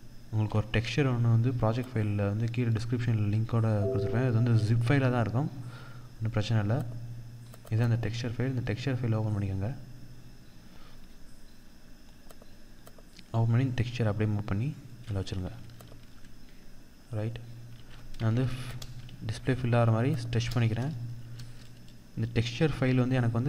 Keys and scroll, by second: 15.2 ctrl+0, 17.1 ctrl+-, 17.9 ctrl+t, 20.7 Return.